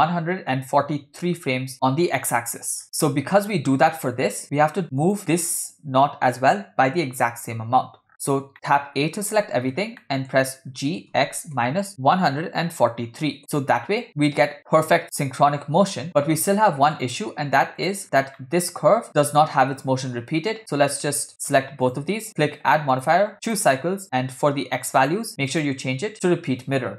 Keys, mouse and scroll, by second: 2.8 scroll down 6, 3.0 shift+middle click, 5.2 click, 8.1-8.4 scroll up 1, 8.4 scroll down 2, 8.5 middle click, 9.5 a, 9.7-10.2 scroll down 3, 10.2 middle click, 11.1 g, 14.1 click, 14.6 middle click, 14.6 scroll down 2, 15.0-15.4 scroll up 2, 15.0 click, 17.1 click, 18.4 scroll down 2, 18.4 middle click, 21.4 click, 22.3 click, 23.0 click, 25.0 click, 25.5-26.7 drag.